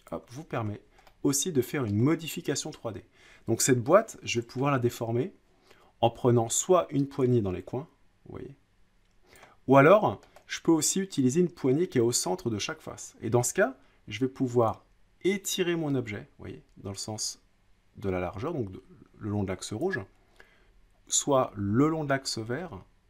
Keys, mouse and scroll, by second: 0.1 click, 0.7 scroll up 2, 2.0 middle click, 2.0-2.9 scroll up 3, 4.6 middle click, 9.3 click, 10.2 middle click, 10.3 scroll up 3, 19.8-20.8 drag, 20.9 click.